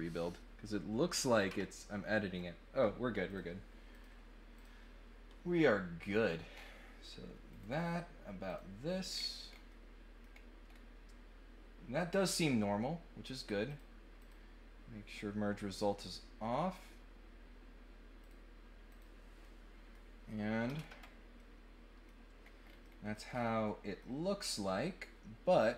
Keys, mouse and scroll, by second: 3.2 click, 3.9 click, 4.5 click, 6.5 middle click, 6.5 scroll up 1, 7.4 click, 8.4 click, 9.0-9.5 scroll down 4, 9.7 middle click, 10.6 scroll up 2, 13.6 click, 14.2 click, 18.2 click, 18.8 click, 19.4 middle click, 21.4 middle click, 22.4 scroll up 1, 22.6 scroll down 1, 22.8 middle click, 23.2 scroll up 1, 23.6 middle click.